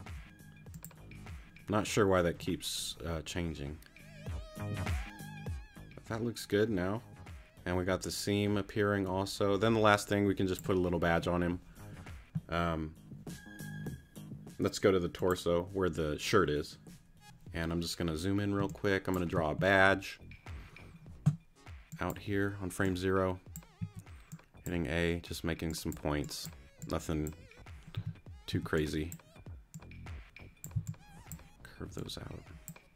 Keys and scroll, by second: 18.6 space, 23.8 a, 27.9 t, 28.5 a, 30.7 c.